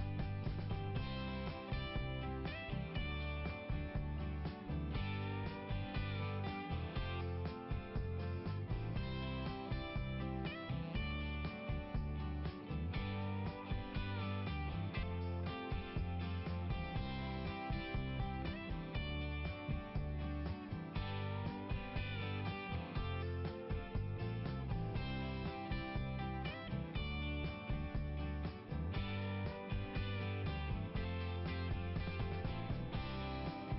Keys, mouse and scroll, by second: 0.0 click, 2.6 click, 4.7 click, 6.6 click, 11.2 click, 11.3 click, 12.4 click, 14.8 click, 14.9 click, 15.4-16.0 scroll up 1, 18.9-20.1 scroll down 1, 21.9 click, 24.0 click, 24.2 click, 26.3 click, 29.4 click, 31.2 click.